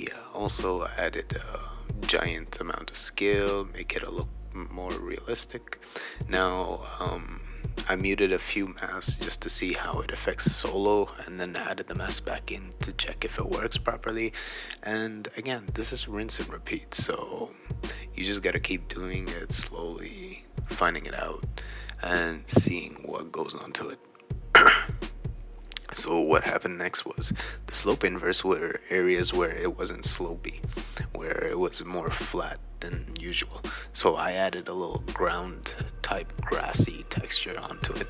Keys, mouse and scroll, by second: 0.1 right click, 1.2 click, 1.9 click, 2.6 BackSpace, 3.3 BackSpace, 4.2 right click, 5.1 click, 6.2 BackSpace, 6.6 BackSpace, 7.9 BackSpace, 10.6 right click, 13.3 click, 13.8-14.9 drag, 15.3 click, 16.4 click, 17.0-19.1 right drag, 17.2-18.6 typing, 19.6 BackSpace, 20.6 click, 20.9 click, 21.0-22.8 typing, 21.1-22.8 right drag, 23.0 click, 23.6 click, 24.5 click, 24.8 click, 25.3 click, 25.5 click, 26.1 click, 26.3-28.0 typing, 26.4 shift+right click, 27.1 click, 27.8 right click, 31.4-33.0 right drag, 31.7 e, 33.1-33.9 scroll down 2, 34.9 click, 35.4 click, 36.2-37.7 typing, 36.2-37.4 right drag.